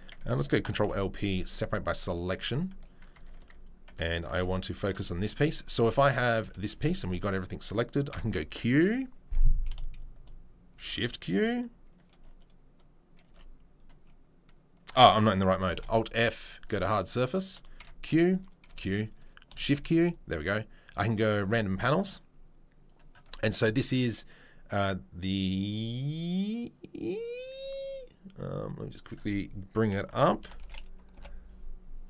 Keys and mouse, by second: 0.8 p, 2.4 Tab, 3.1 Tab, 3.5 click, 3.8 Tab, 4.4 ctrl+r, 6.4 a, 7.0 Tab, 8.1 q, 15.8 alt+f, 17.8 q, 18.7 q, 19.5-32.0 shift+middle drag, 19.6 shift+q.